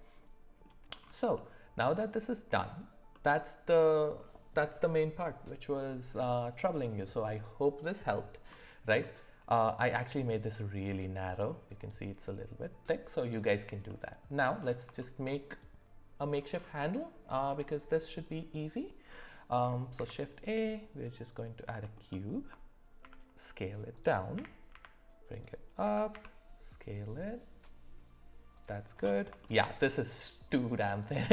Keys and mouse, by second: 1.3-2.8 middle drag, 3.1-4.2 middle drag, 9.0 middle click, 13.9-14.3 middle drag, 15.0 shift+middle click, 15.5 click, 19.9 shift+a, 23.0 s, 24.3 g, 25.8 s, 29.4 shift+middle drag.